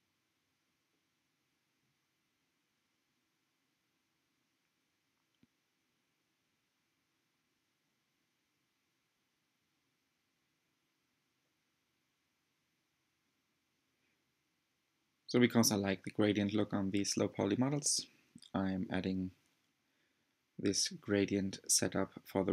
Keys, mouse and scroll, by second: 12.0-12.7 scroll down 2, 12.7 shift+middle click, 13.2 click, 14.5 shift+a, 16.8 shift+a, 17.8 click, 18.1-18.5 drag, 18.9 click, 20.5 click, 21.0 drag, 22.0 click, 22.0 scroll up 1, 22.3-22.5 shift+middle drag.